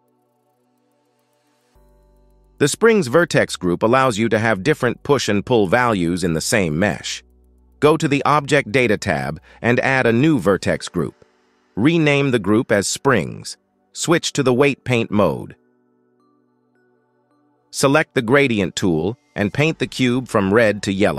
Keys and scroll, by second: 18.4 shift+Left, 20.2 KP_1.